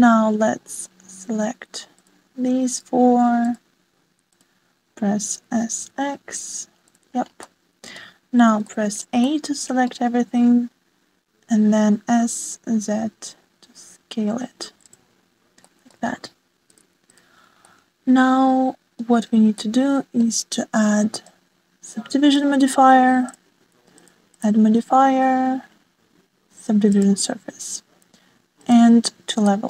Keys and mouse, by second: 2.9 shift+click, 4.0 s, 6.1 click, 7.3 shift+click, 7.5 shift+middle click, 7.9 middle click, 8.9 a, 10.6 s, 14.3 shift+middle click, 15.2 click, 16.3-17.6 middle drag, 18.3-18.7 middle drag, 18.8 middle click, 19.8-21.1 drag, 22.9-25.6 drag, 23.4 ctrl+2, 27.3 middle click, 28.0 shift+middle click.